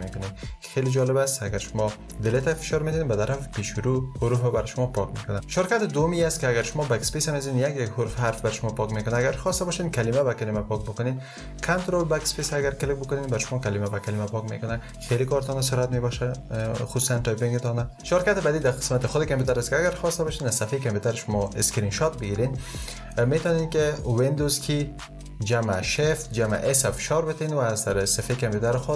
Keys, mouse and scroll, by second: 12.6 ctrl+BackSpace, 25.7 shift+super+s.